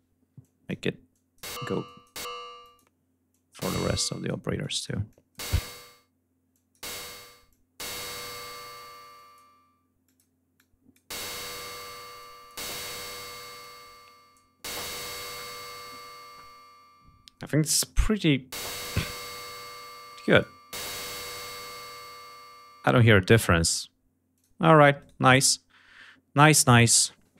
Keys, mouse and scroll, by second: 0.1 click, 0.8 click, 1.5 click, 2.3 click, 3.0 click, 3.8 click, 4.3 click, 4.8 click, 6.2 click, 7.2 click, 8.1 click, 8.8 click, 9.7 click, 10.2 click, 11.2 click, 11.9 click, 13.3 click, 20.0 click, 24.0 click, 24.7 right click.